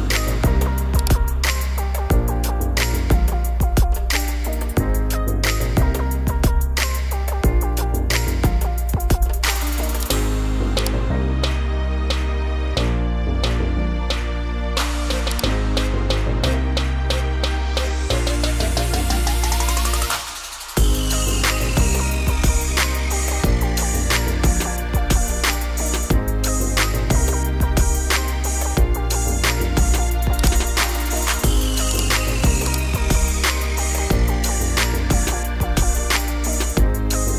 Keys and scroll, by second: 17.3 Right, 17.8 Down, 22.3 Up, 23.6 Down, 33.5 BackSpace, 36.1-37.3 typing.